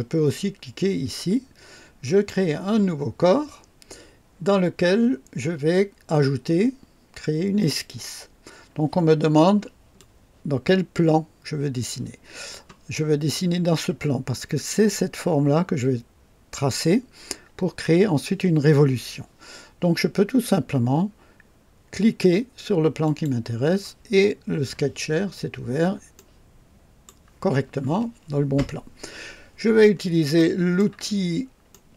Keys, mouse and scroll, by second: 2.0 click, 7.6 click, 9.2-9.6 scroll down 1, 10.0-12.7 drag, 23.0 click, 24.2-24.8 scroll up 2, 26.1-27.3 right drag, 29.9 scroll up 2, 30.4-31.0 right drag, 31.1 scroll up 1, 31.7 right click.